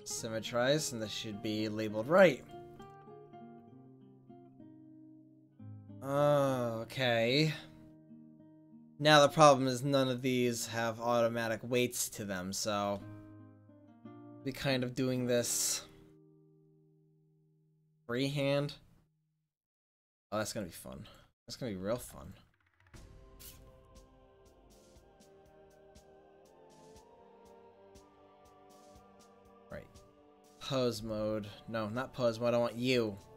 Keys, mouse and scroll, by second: 1.0-3.6 right drag, 3.7 middle click, 4.0 right click, 4.6 middle click, 4.6 click, 4.7 middle click, 13.6 ctrl+s, 20.5-22.0 drag, 22.0 ctrl+s, 28.6 click, 29.7 click, 31.3-33.3 right drag.